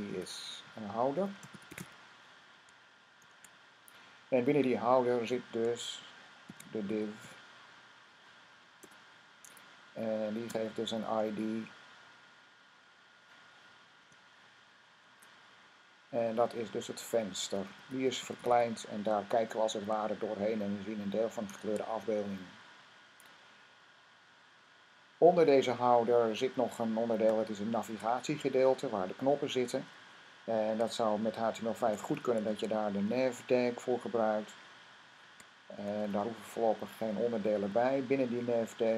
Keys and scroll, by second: 0.8-3.0 typing, 6.1-7.0 typing, 8.4 typing, 13.9 typing, 16.4-18.7 typing, 21.3 typing, 29.3 Up, 29.6 Up, 31.4-32.7 typing, 34.8-35.6 typing, 38.6 typing.